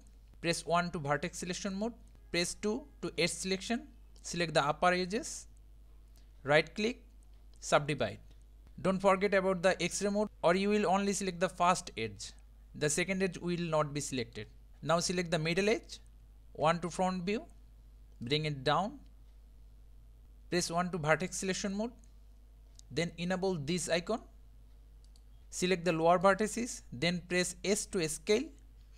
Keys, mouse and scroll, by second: 1.1 1, 1.3 1, 3.1 2, 4.2 click, 6.8-8.6 right drag, 10.2-12.6 middle drag, 13.8-14.7 middle drag, 14.9 click, 15.9 click, 16.6 KP_1, 18.2 click, 20.7 1, 25.1 click, 25.6 click, 27.8 s.